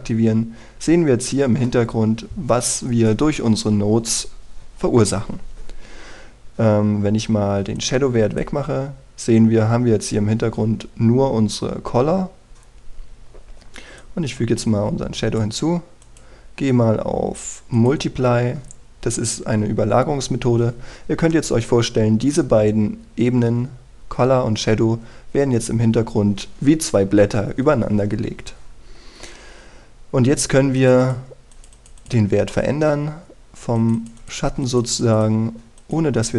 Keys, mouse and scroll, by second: 0.3 click, 1.0-2.4 scroll down 1, 2.4 scroll up 1, 8.4-36.3 drag.